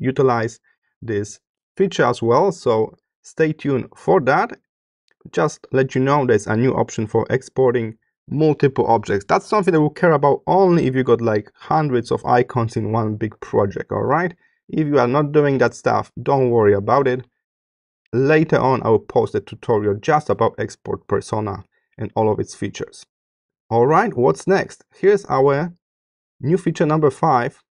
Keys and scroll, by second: 20.7 space, 25.3 space.